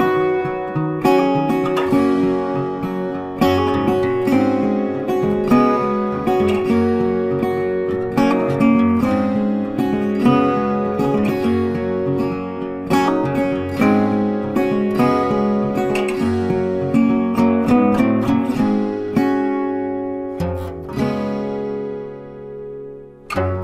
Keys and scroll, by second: 17.2 ctrl+t.